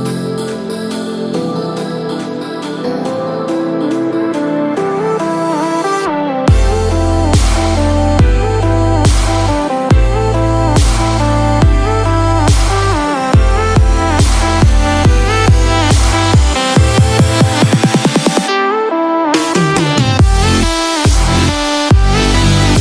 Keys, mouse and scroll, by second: 4.9 scroll up 3, 5.9 g, 8.9 scroll up 4, 9.4 shift+middle click, 10.0 scroll up 1, 12.2 Tab, 13.9 click, 14.3 scroll up 2, 15.3 shift+middle click, 16.9 click.